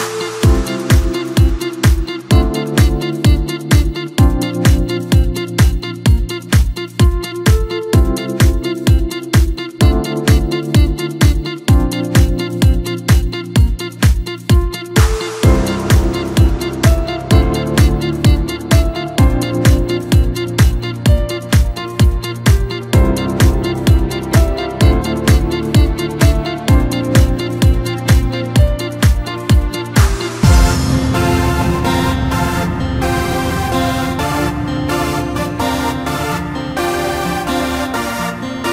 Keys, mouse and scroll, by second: 0.4 alt+h, 3.5 KP_3, 4.4-5.8 scroll up 7, 5.8 scroll down 2, 6.0-8.1 middle drag, 8.1-8.6 scroll down 6, 8.6 Tab, 9.1-10.2 middle drag, 10.2 KP_3, 14.2 click, 14.8-15.7 middle drag, 15.7-16.3 scroll up 1, 16.3-17.4 right drag, 17.4 scroll down 1, 17.6-20.4 middle drag, 20.4-21.2 scroll up 2, 21.2 KP_1, 22.0-22.4 scroll down 2, 22.4-22.8 scroll up 1, 22.8 Tab, 24.7 2, 25.3 click, 25.5 click, 26.0-26.9 scroll down 1, 26.9 ctrl+i, 27.3 h, 28.0 KP_7, 28.7 1, 29.5 click, 30.2 shift+click, 30.9 KP_1, 32.2 click, 33.3 ctrl+KP_2, 33.6 ctrl+KP_2, 33.7 ctrl+KP_2, 34.3 g, 38.0 ctrl+h.